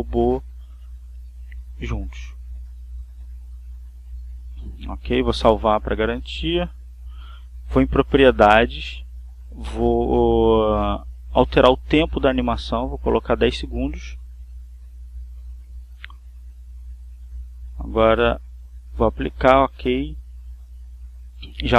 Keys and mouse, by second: 1.0 click, 2.6 ctrl+z, 4.6 click, 7.6 click, 8.8 click, 11.6 click, 13.2 1, 13.6 0, 14.1 s, 15.0 click, 18.5-19.8 drag, 19.8 click.